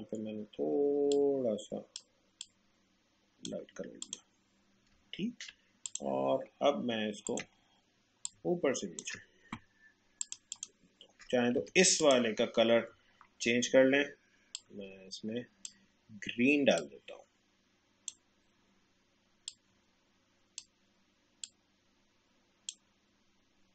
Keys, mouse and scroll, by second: 5.1 alt+scroll up 1, 5.9-10.2 drag, 11.5 a, 12.0 click, 14.5-23.7 drag.